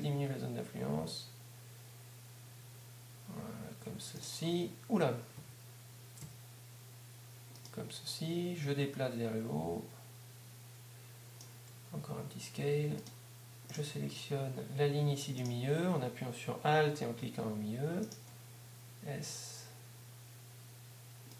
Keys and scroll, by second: 8.1 s, 12.1 s, 18.6 alt+s.